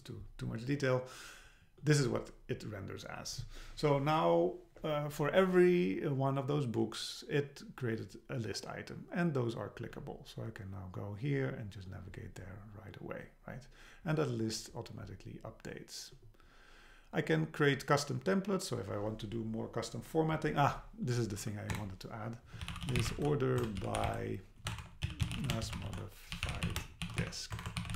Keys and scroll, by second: 21.7 Return, 23.6 BackSpace, 27.6 BackSpace.